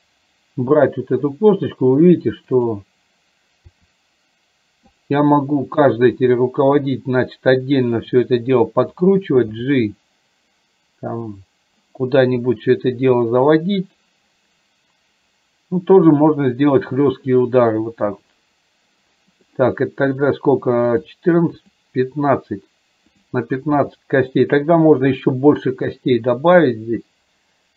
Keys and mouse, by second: 3.9 r, 5.7 click, 6.1 r, 9.1 click, 9.7 g, 21.1 click, 23.8 g.